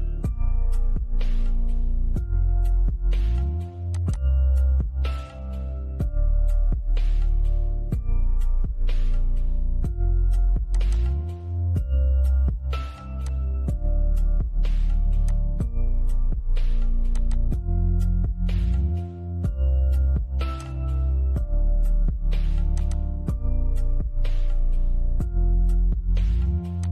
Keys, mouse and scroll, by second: 3.2 click, 10.0 click, 12.4 click, 13.3 scroll down 1, 14.5 click, 18.3 middle click, 19.8 click, 22.0 click, 26.0 click.